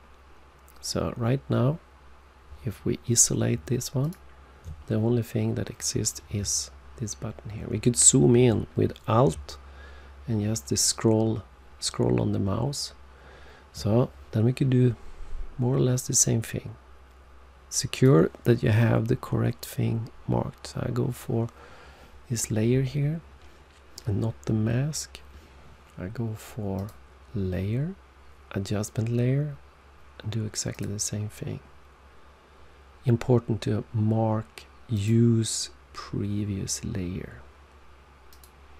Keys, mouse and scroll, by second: 4.0 alt+click, 6.5 alt+scroll up 1, 9.9 alt+scroll up 1, 17.9 click, 26.7 click, 30.7 click, 34.9 click, 38.3 click.